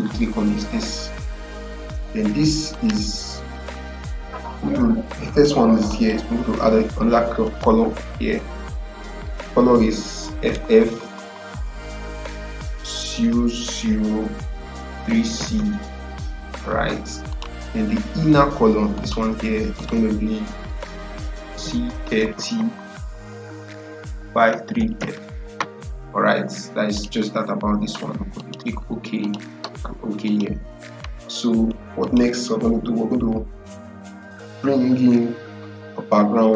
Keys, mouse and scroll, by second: 2.6 click, 5.8 click, 7.4 BackSpace, 7.8 f, 10.3 f, 13.0-15.8 typing, 17.2 click, 21.4-22.7 typing, 24.0-25.1 typing, 26.8 click.